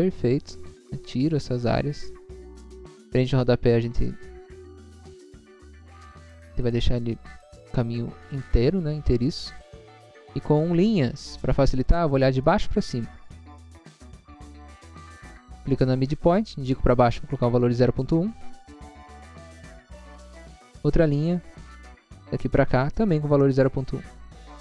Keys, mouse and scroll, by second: 0.3 scroll up 1, 1.0 scroll up 1, 1.3 click, 1.4 click, 1.7 click, 2.3 click, 3.1 click, 3.2 click, 3.5 click, 4.3 scroll down 1, 4.9 scroll down 1, 5.3-6.0 scroll up 2, 6.2 click, 6.3 click, 7.3 click, 7.9 scroll down 1, 9.9 click, 11.0 middle click, 11.4 middle click, 12.0 middle click, 12.5 middle click, 13.0 middle click, 13.5 middle click, 13.9-14.5 scroll up 2, 14.6 middle click, 15.0 middle click, 15.0 scroll down 1, 16.0 click, 16.8-17.4 scroll up 1, 18.0-18.9 typing, 19.4 Return, 20.0 scroll up 1, 20.7 i, 21.3 scroll up 1, 21.9 click.